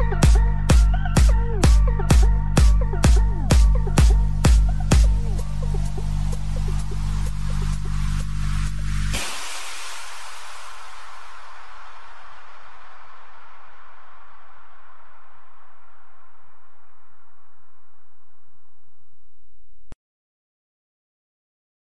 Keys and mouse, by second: 1.2 click, 1.2 u, 7.7 click, 8.4 click, 8.8 i, 11.4 click, 11.4 i, 13.1 click, 13.1 i, 13.7 click, 16.4 click, 18.8 ctrl+k, 18.8 click, 20.4 ctrl+k, 20.4 click, 21.0 ctrl+k, 21.0 ctrl+?, 21.0 click, 21.7 ctrl+?.